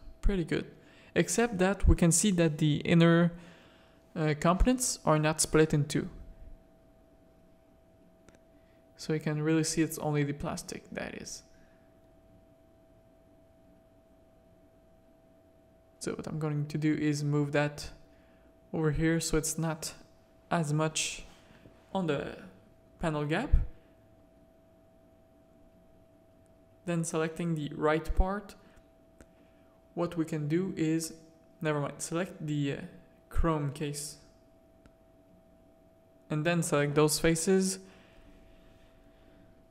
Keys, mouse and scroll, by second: 2.7 middle click, 3.3 scroll up 1, 3.3 middle click, 4.0 middle click, 5.7-6.1 drag, 6.1 middle click, 7.0 middle click, 9.3 click, 9.8 click, 11.0 z, 12.2 click, 13.7 click, 14.1 z, 14.5 Tab, 14.6 a, 14.9 z, 15.6 click, 16.2 Tab, 16.5 z, 16.6 z, 17.3 alt+a, 17.3 z, 21.7 middle click, 23.4 z, 24.2 middle click, 25.1 shift+middle drag, 26.0-27.6 middle drag, 27.8 shift+middle click, 29.8 click, 30.7 Tab, 30.9 a, 31.5 middle click, 32.0 shift+middle click, 32.6 middle click, 33.4 shift+middle click, 34.1 middle click, 34.8-36.2 drag, 37.9 shift+click.